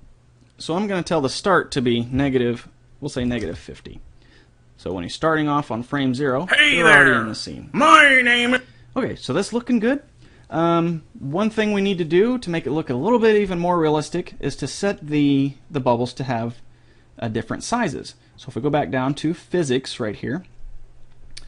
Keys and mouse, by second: 1.6-3.5 drag, 5.3-8.2 drag, 8.8-10.7 drag, 18.2-19.8 drag.